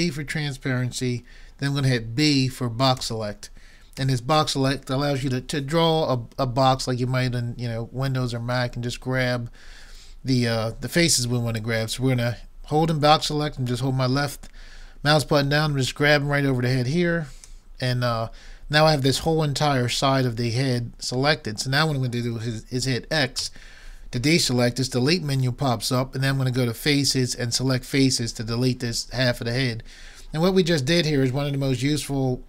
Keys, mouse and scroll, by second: 4.0 b, 23.4 x.